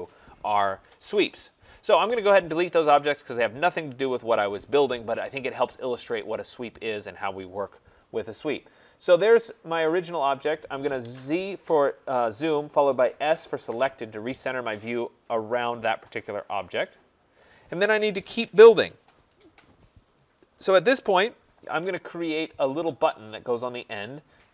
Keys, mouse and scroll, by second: 0.7 Escape, 0.8 Escape, 1.0 Escape, 3.1 click, 4.0 Delete, 6.7 middle click, 6.9 middle click, 7.0-7.4 scroll, 7.7-8.0 scroll, 8.8 right click, 9.1 scroll, 9.2 middle click, 10.1 click, 11.0 z, 11.6 Return, 13.0 s, 13.6 Return, 14.6-15.0 scroll, 17.3 right click, 20.6 right click.